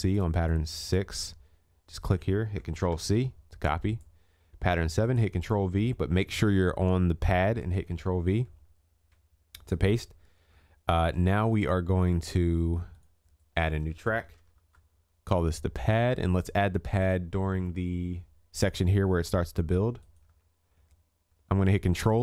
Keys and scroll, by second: 2.7 ctrl+c, 20.4 ctrl+s.